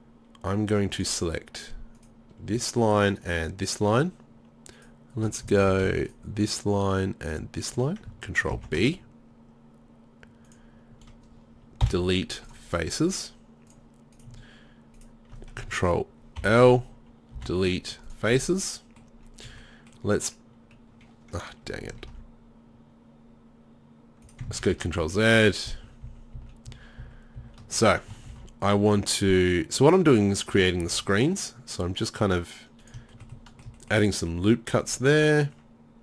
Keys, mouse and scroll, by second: 5.6 ctrl+z, 8.5 ctrl+b, 12.0 Delete, 16.4 ctrl+l, 17.4 Delete, 18.4 z, 19.5 a, 22.1 ctrl+r, 24.6 ctrl+z, 25.1 ctrl+z, 25.4 ctrl+z, 25.8 ctrl+z, 26.1 ctrl+z, 26.4 ctrl+z, 26.7 ctrl+z, 27.0 ctrl+z, 27.4 ctrl+z, 28.3 ctrl+r, 30.8 ctrl+r, 33.4 middle click, 33.8-35.0 middle drag.